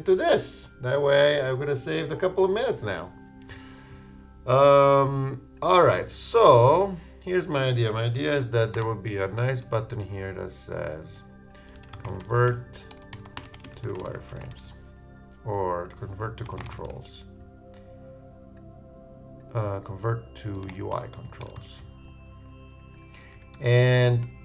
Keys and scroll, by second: 11.7 shift+Return, 11.8 shift+c, 13.6-14.4 typing, 20.5 shift+Return, 20.7 shift+u, 20.9 shift+space, 21.1 shift+Right, 21.5 shift+BackSpace, 21.6 shift+c.